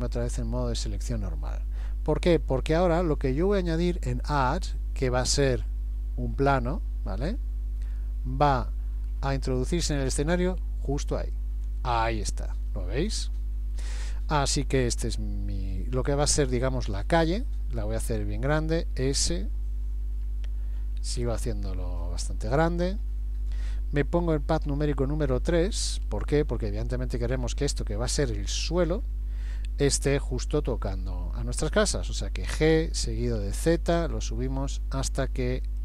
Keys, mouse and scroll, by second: 0.1 click, 2.3 scroll up 1, 4.3 click, 12.7 middle click, 14.4 middle click, 18.1 s, 19.8-20.9 scroll down 5, 20.9 scroll down 3, 20.9 s, 24.7 KP_3, 26.0-27.7 scroll up 9, 32.5 g.